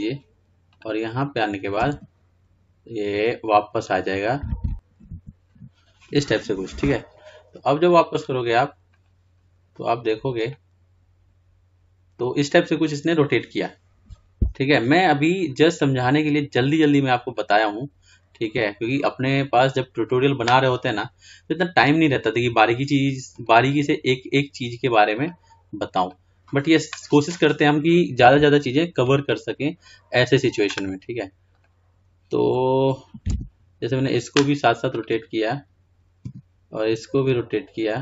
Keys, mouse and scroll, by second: 1.1-4.4 drag, 8.1-13.3 drag, 14.6-15.0 drag, 15.8-22.7 drag, 23.5-32.8 drag, 34.3 r, 35.4 click.